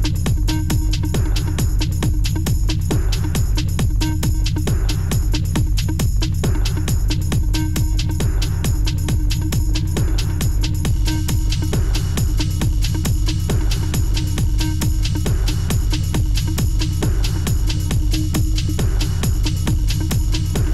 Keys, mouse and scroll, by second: 4.0 Return, 6.9 b, 7.6 double click, 7.7 double click, 12.0 ctrl+z, 12.5 ctrl+shift+a, 18.5 ctrl+u.